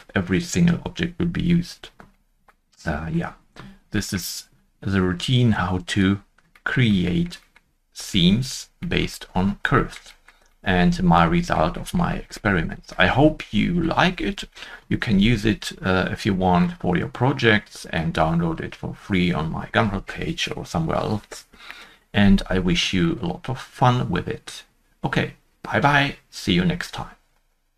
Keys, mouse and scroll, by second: 2.4 shift+middle click, 2.8 middle click, 3.6 scroll down 1, 6.2 scroll down 1, 7.0 middle click, 9.0 scroll down 1, 10.0-10.4 scroll down 1, 10.4 shift+middle click, 10.6 middle click, 11.7 middle click, 12.5-13.1 scroll down 1, 13.1-20.8 scroll down 2, 23.0 middle click.